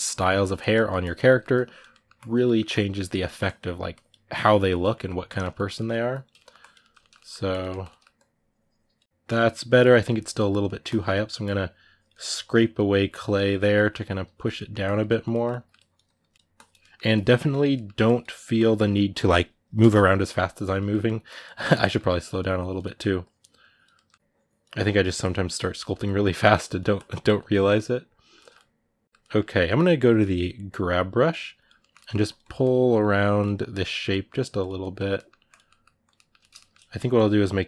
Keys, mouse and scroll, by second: 0.0 ctrl+middle click, 0.5 click, 1.0 ctrl+middle click, 1.3 click, 1.7 middle click, 1.9 click, 2.2 middle click, 2.5 click, 3.0 middle click, 3.2-4.7 drag, 4.7 middle click, 5.0 click, 5.3 middle click, 5.9 click, 6.1 ctrl+middle click, 6.3 click, 6.6 ctrl+middle click, 7.3 click, 7.4 ctrl+middle click, 7.9-9.0 drag, 9.0 middle click, 9.5 click, 9.8 middle click, 10.1 click, 10.4 middle click, 10.6 click, 10.9 middle click, 11.2 click, 12.1 middle click, 12.3-13.4 drag, 13.4 middle click, 13.6 click, 14.3 middle click, 14.6 click, 15.1 ctrl+middle click, 15.5 click, 16.1 middle click, 16.3 click, 16.6 middle click, 16.9 click, 17.1 middle click, 17.8 click, 18.0 middle click, 18.3-20.7 drag, 20.7 middle click, 21.0 click, 21.6 middle click, 22.0 click, 22.6 middle click, 23.0 click, 23.7 middle click, 24.0 click, 24.5 ctrl+middle click, 25.0 click, 25.5 middle click, 25.8 click, 26.0 middle click, 26.4 click, 27.3-30.6 middle drag, 30.6 g, 31.3 click, 31.6 ctrl+middle click, 32.0-33.5 drag, 33.5 middle click, 33.9 click, 34.6 middle click, 35.3 click, 35.4 middle click, 35.8 click, 35.9-36.9 ctrl+middle drag, 36.9 click.